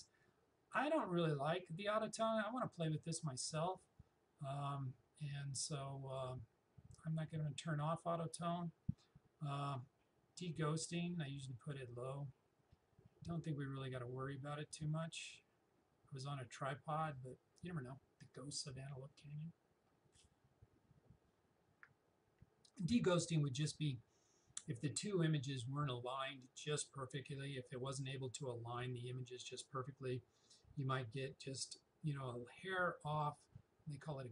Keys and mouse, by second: 3.9 click, 9.7 click.